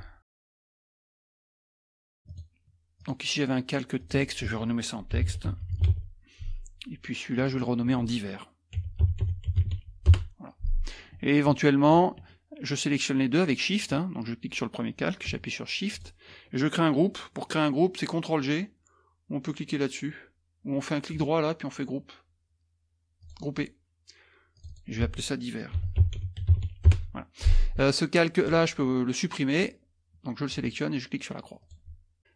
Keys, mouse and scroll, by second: 0.0-2.0 typing, 3.1 click, 4.0 click, 4.9-6.5 typing, 7.4 click, 8.5-10.2 typing, 11.9 shift+click, 13.8 click, 15.9 shift+click, 21.2-22.4 right drag, 23.2 click, 24.5 click, 25.5-27.1 typing, 28.4 click, 30.5 click, 31.6 click.